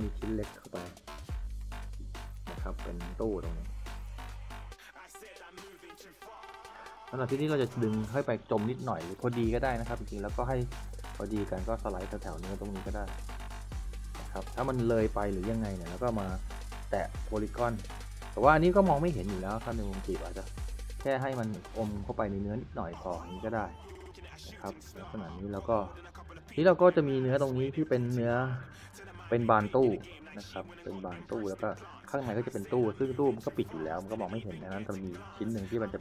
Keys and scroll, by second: 0.0-0.2 typing, 2.0 s, 3.0 w, 8.7 e, 14.5-16.6 typing, 19.4 e, 23.0-26.2 typing, 32.6 w.